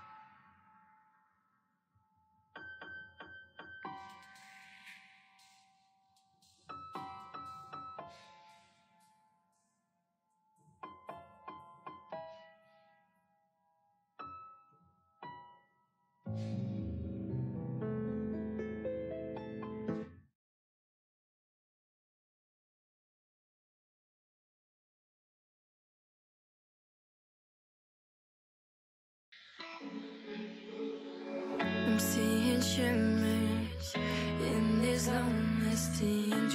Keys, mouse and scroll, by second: 0.1 g, 0.7 click, 1.1 g, 1.7 click, 2.0 g, 2.8 click, 3.1 g, 4.0 click, 4.3 g, 5.0-5.6 scroll down 3, 5.6 KP_1, 6.0-7.1 shift+middle drag, 8.1 KP_7, 9.0 click, 9.3 shift+middle click, 9.8 g, 11.2 e, 12.3 s, 13.6 g, 14.7 e, 15.7 s, 17.1 g, 18.1 s, 19.9 e, 22.4 s, 24.4 KP_1, 25.3 KP_3, 25.8 KP_1, 26.7-27.1 scroll up 2, 27.1 shift+middle click, 27.5-28.6 scroll up 3, 27.7 shift+middle click, 28.6 s, 30.2 g, 31.1 click, 31.8-34.5 typing, 35.4 click, 35.7-36.5 typing.